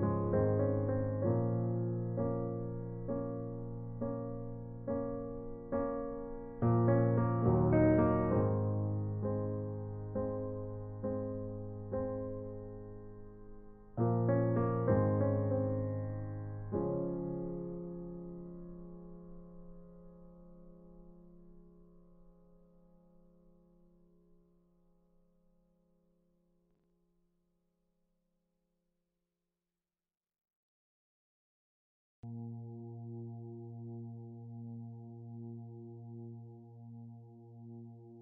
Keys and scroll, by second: 8.1 ctrl+t, 13.9 Return, 28.0 space, 33.7 space.